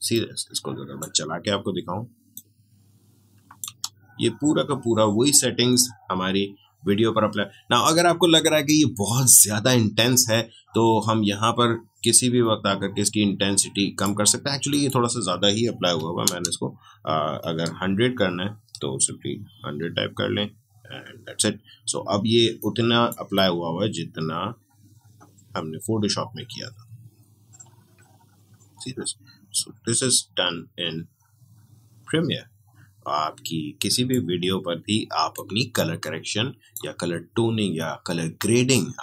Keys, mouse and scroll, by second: 0.1-3.6 drag, 3.6 space, 12.4-14.6 drag, 17.6 BackSpace, 19.0 1, 22.6-34.2 drag.